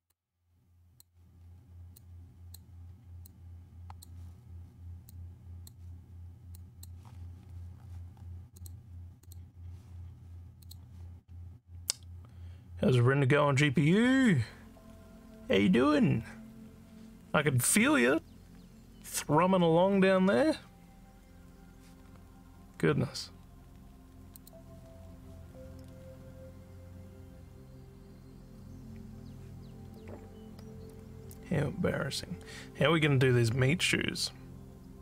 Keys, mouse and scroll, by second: 0.1 click, 1.9 click, 3.2 click, 5.0 click, 6.5 click, 8.5 click, 9.2 click, 10.6 click, 24.3 click.